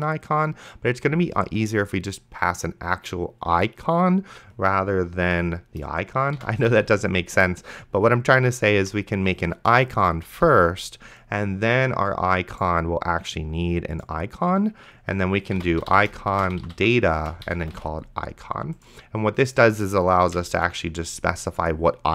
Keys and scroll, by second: 6.3-7.5 typing, 8.8 Down, 10.3 Return, 15.5-18.5 typing, 20.3 ;, 20.8 ctrl+s.